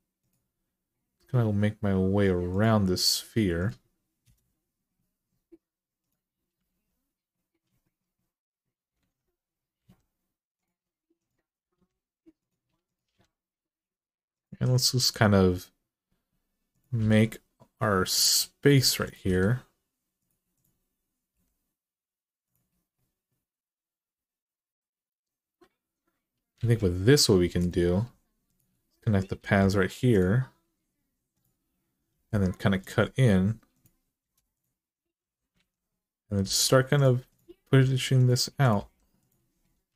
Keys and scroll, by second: 4.0 Return, 6.4 alt+z, 8.8 alt+z, 9.6 g, 11.4 g, 12.8 g, 16.8 g, 19.0 g, 21.1 g, 26.3 alt+z, 29.2 j, 31.9 k, 34.0 Return, 35.3 alt+z, 36.2 g, 37.6-38.6 typing, 39.8 alt+z.